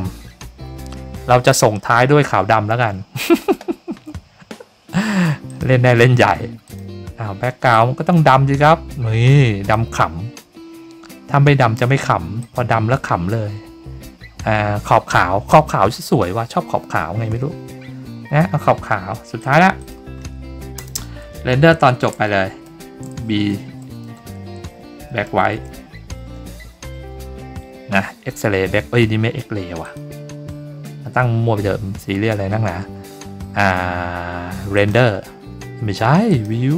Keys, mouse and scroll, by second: 5.4 click, 6.6 click, 7.7-9.7 drag, 12.4 click, 19.4 click, 19.8 click, 29.8 click, 34.7 click, 36.3 click.